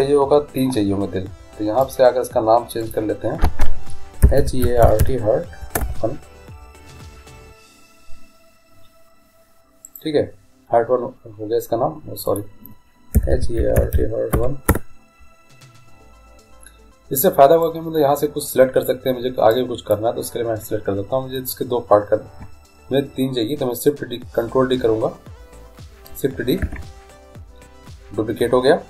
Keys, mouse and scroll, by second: 2.0-10.0 drag, 12.4-14.3 drag, 17.8-21.7 drag, 26.8 shift+d.